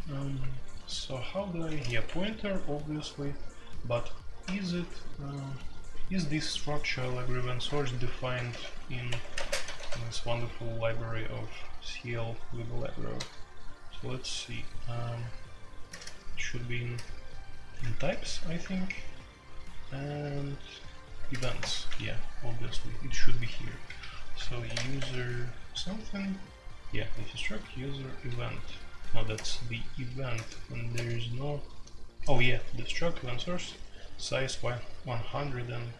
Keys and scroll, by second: 1.7-3.0 typing, 2.0 Escape, 4.7 super+k, 7.4 super+k, 8.5 f, 9.0 Escape, 9.3 space, 9.6 f, 9.8 f, 13.1 BackSpace, 15.9 ctrl+n, 16.0 ctrl+n, 16.9 ctrl+n, 17.9 /, 21.3 ctrl+n, 21.6 Return, 22.6-25.1 typing, 25.7 Return, 26.9 Escape, 29.3-34.1 typing.